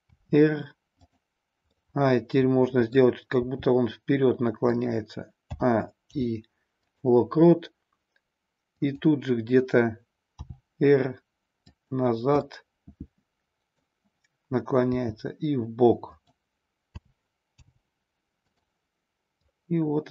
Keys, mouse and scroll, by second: 0.1 r, 1.1 click, 1.6-3.1 middle drag, 3.3 r, 4.7 click, 5.5 a, 6.0 i, 8.7 click, 10.4 r, 11.7 click, 12.4-13.9 middle drag, 14.9 r, 16.1 click, 16.9 a, 17.5 i, 19.4-20.1 drag.